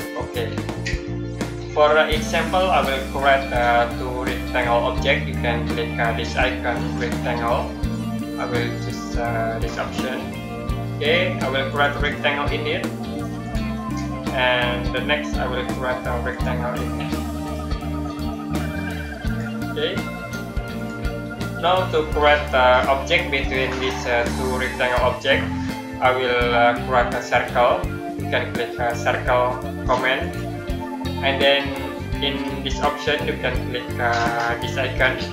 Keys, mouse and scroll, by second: 6.6 click, 9.6 click, 16.2 click, 19.1 click, 30.1 click, 35.1 click.